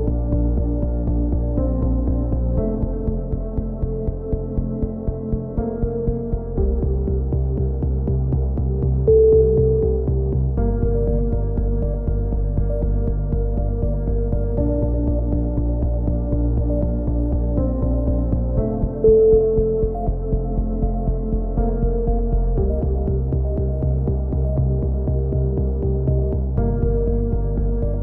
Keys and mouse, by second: 0.9 KP_3, 1.0 z, 2.4-3.9 drag, 2.8 z, 4.6-5.2 drag, 5.0 c, 5.6-6.1 middle drag, 6.1 click, 7.0-8.0 drag, 8.0 a, 8.3 z, 8.6 Tab, 9.0-9.6 drag, 14.5 KP_3, 15.0 z, 15.3 Tab, 15.5-16.1 drag, 16.4 z, 17.0 z, 17.2 z, 17.4 z, 17.9 ctrl+r, 18.8-19.6 drag, 19.6 a, 19.8 click, 20.3 ctrl+r, 21.6-22.2 drag, 22.0 a, 22.8-23.3 drag, 23.6 z, 24.0 z, 25.0-25.6 drag, 27.3 middle drag, 27.3 z, 27.5-28.0 drag.